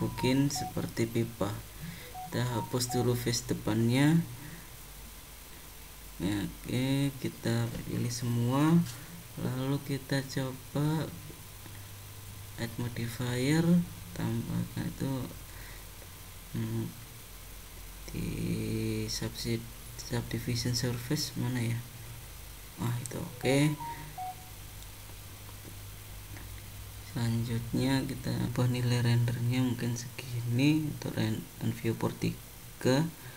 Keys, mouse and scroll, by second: 2.6 Delete, 2.6 d, 3.9 middle click, 5.7 click, 7.2 a, 12.6 click, 24.4 middle click, 27.6 click, 29.1 click, 30.2 click, 32.6 click.